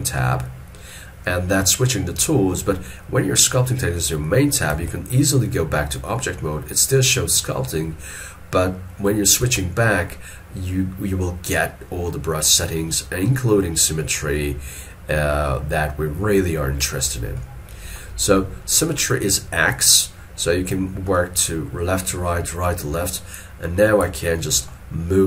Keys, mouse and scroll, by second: 4.8 ctrl+Tab, 9.5 ctrl+Tab, 17.4 middle click, 21.2 middle click.